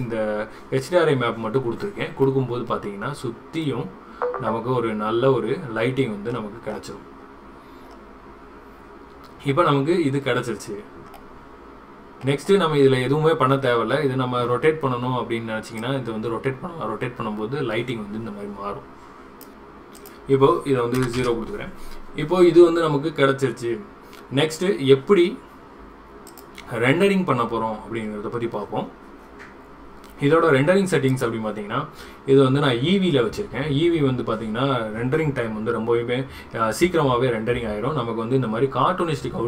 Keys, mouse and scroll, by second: 26.3 click, 31.1 click.